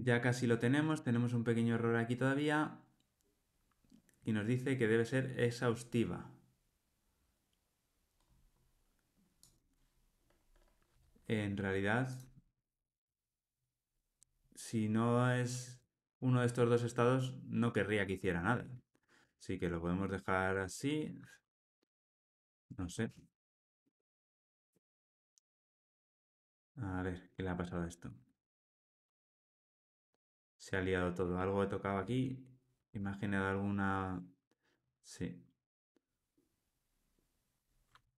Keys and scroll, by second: 12.5 alt+Return, 19.2 Tab, 23.6 alt+super+l, 28.2 alt+super+l, 30.1 super+z, 30.6 super+z, 31.1 super+z, 32.7 super+z.